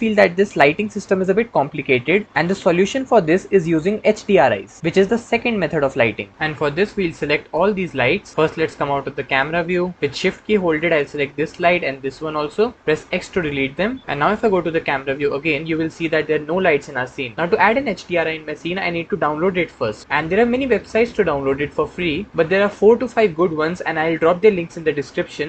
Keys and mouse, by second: 6.9 click, 7.9 click, 8.3 middle click, 9.5-10.3 middle drag, 10.9-11.3 shift+middle drag, 11.6 shift+click, 14.0-15.0 middle drag, 14.0 x, 14.7 KP_0.